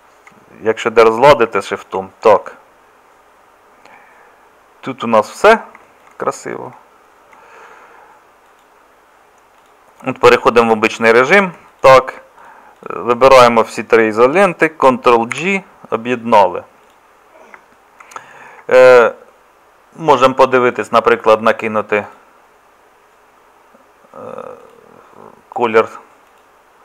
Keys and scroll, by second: 15.4 ctrl+j.